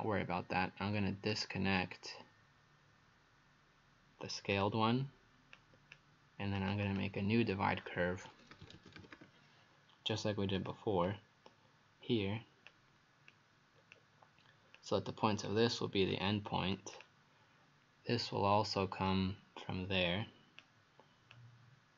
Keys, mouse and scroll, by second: 1.3 right click, 4.6 click, 6.9 click, 8.3-9.7 typing, 10.6 click, 11.1 click, 13.3 click.